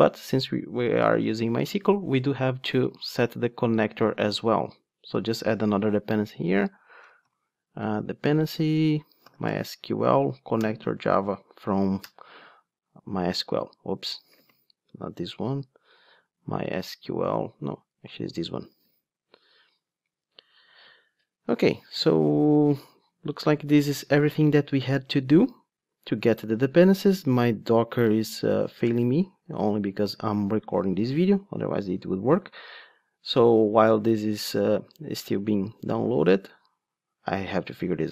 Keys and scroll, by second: 8.2 Return, 14.3 Return, 14.4 ctrl+space, 18.7 super+z.